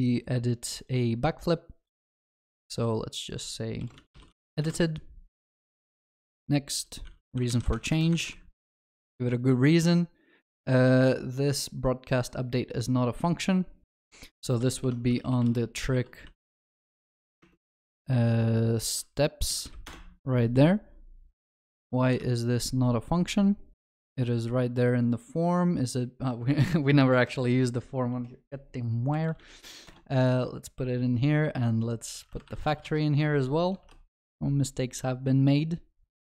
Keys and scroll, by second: 14.9 ctrl+shift+n, 22.1 ctrl+b, 22.2 ctrl+b, 29.9 Return.